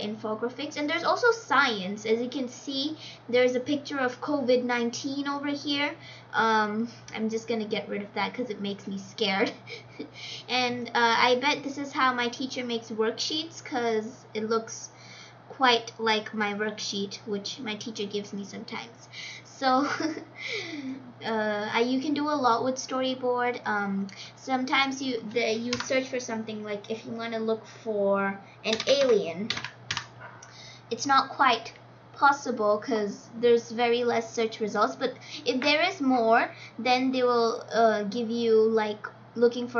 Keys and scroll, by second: 25.6 BackSpace, 28.4-29.9 typing.